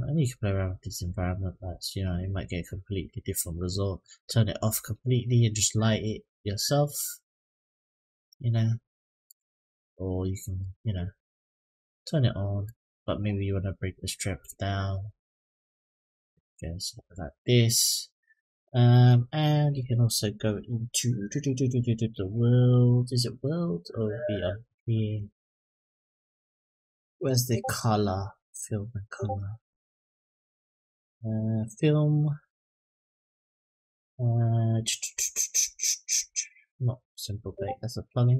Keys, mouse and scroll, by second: 6.2 click, 6.8-8.1 drag, 9.0-16.4 drag, 19.5 click, 20.1-20.9 scroll up 1, 21.5 click, 23.7 click, 24.8-26.7 scroll down 9, 27.0-28.2 scroll up 6, 28.2 click, 29.3 click, 30.1-32.0 scroll down 8, 32.0 click, 33.2-34.1 scroll down 1, 34.8-35.1 scroll down 1, 35.5-36.1 scroll down 3, 36.7 click, 37.3-38.3 scroll down 2.